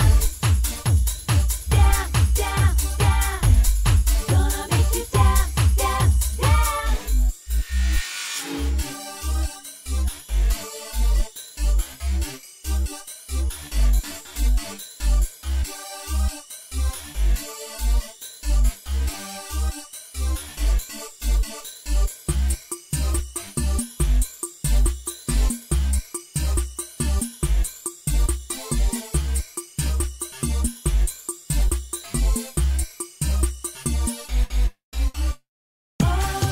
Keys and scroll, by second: 10.5-11.6 typing.